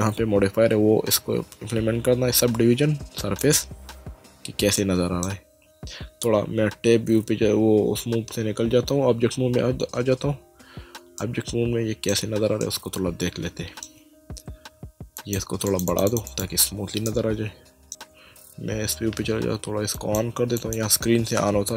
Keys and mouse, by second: 3.2 click, 4.8 middle click, 7.1 Tab, 11.2 ctrl+middle click, 12.6 shift+middle click, 15.2 click, 17.9 click, 18.1 Tab, 19.9 click.